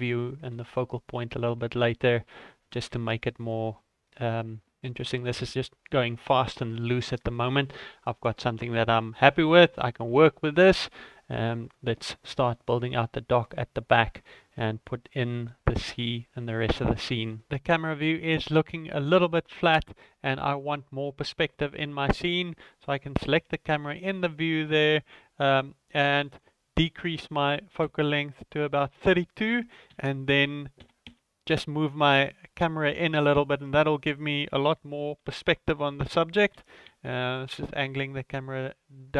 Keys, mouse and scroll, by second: 0.5 ctrl+middle click, 1.1 middle click, 1.6 shift+middle click, 2.6 ctrl+middle click, 3.2 ctrl+middle click, 3.7 middle click, 4.3 shift+middle click, 5.1 middle click, 6.8 shift+middle click, 8.1 click, 8.5-9.1 scroll up 5, 9.2 scroll down 2, 9.6 shift+middle click, 10.1 n, 10.8 shift+middle click, 23.2 right click, 23.3 right click, 26.3 click, 29.9 g, 35.2 z, 36.5 g.